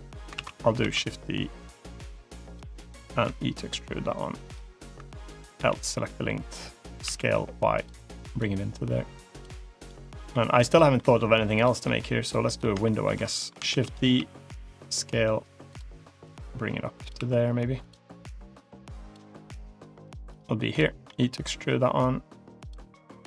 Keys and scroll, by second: 0.2 ctrl+z, 0.7 shift+d, 3.1 e, 5.4 l, 6.9 s, 13.6 shift+d, 14.0 s, 20.9 e.